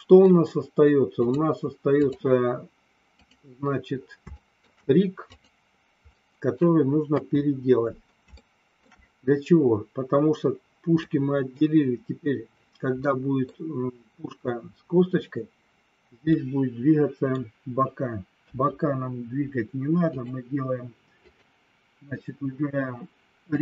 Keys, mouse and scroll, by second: 1.3 click, 3.1 click, 4.3 shift+middle click, 5.3 click, 6.1 middle click, 7.0 KP_1, 8.4 middle click, 11.0 middle click, 13.0 middle click, 16.3-17.4 middle drag, 18.4 KP_1, 20.1 click, 21.3 click, 23.5-23.6 drag.